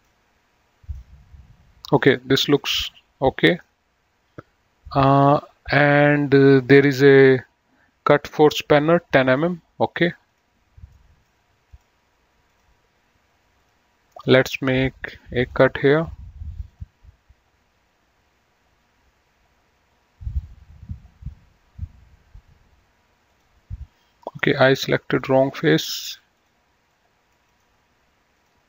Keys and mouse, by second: 0.1 click, 2.7 middle click, 5.2 click, 10.5 click, 11.2 middle click, 11.9 click, 15.6 click, 16.8 click, 23.4 click, 24.5 right click, 25.3 click, 26.5 click, 27.7 right click, 28.4 click.